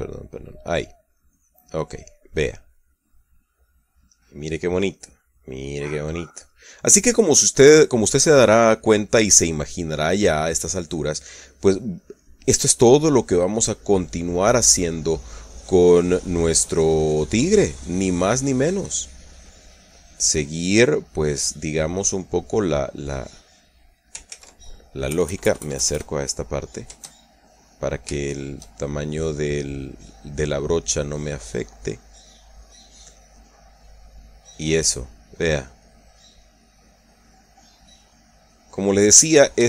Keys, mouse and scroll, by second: 1.7-5.2 drag, 5.5-9.0 drag, 9.2-14.5 drag, 14.8-15.4 middle drag, 15.6 middle click, 16.5-19.5 drag, 19.5-20.0 middle drag, 20.2-21.9 drag, 21.9-23.0 middle drag, 23.1-23.6 middle drag, 24.0 click, 25.0 ctrl+z, 25.8 KP_Add, 27.0-27.4 middle drag, 28.3 click, 28.9 shift+click, 29.8-32.9 drag, 33.0-33.5 middle drag, 33.9-35.8 drag, 36.0 click, 37.1 click, 38.2-39.1 drag, 39.2-39.6 drag.